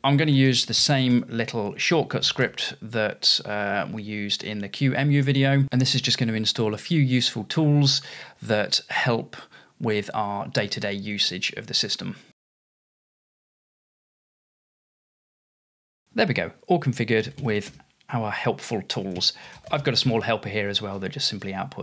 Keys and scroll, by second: 0.0-2.9 typing, 7.7 typing, 10.4 typing, 19.4-21.8 typing.